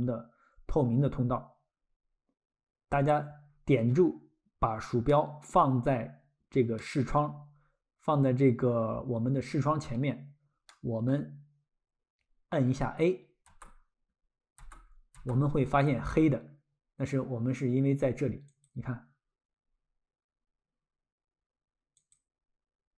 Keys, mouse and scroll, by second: 2.9 click, 3.5-3.9 scroll, 5.1 middle click, 6.1-6.4 scroll, 6.8 middle click, 10.3 scroll, 10.7 middle click, 18.5 click, 22.0 click.